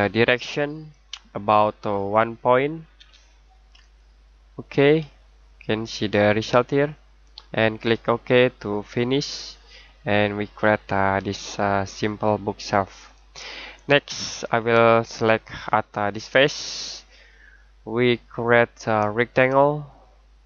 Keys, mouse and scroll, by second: 2.9 1, 3.8 click, 5.0 middle click, 8.7 click, 9.5 middle click, 13.2-16.1 scroll down 1.